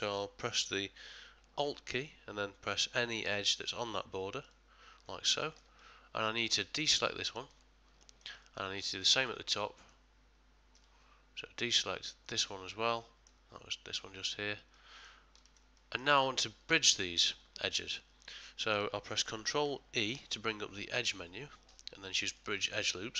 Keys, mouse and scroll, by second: 0.6 shift+middle click, 4.4 alt+click, 5.4 ctrl+middle click, 5.8 middle click, 7.3 shift+click, 8.0 ctrl+middle click, 8.4 middle click, 8.8 shift+middle click, 9.6 ctrl+middle click, 10.3 ctrl+middle click, 10.4 shift+middle click, 10.4 ctrl+scroll up 1, 11.2 ctrl+middle click, 12.2 shift+click, 12.7 ctrl+middle click, 14.7 middle click, 15.4 ctrl+middle click, 15.8 shift+middle click, 17.9 middle click, 18.4 middle click, 20.0 ctrl+e.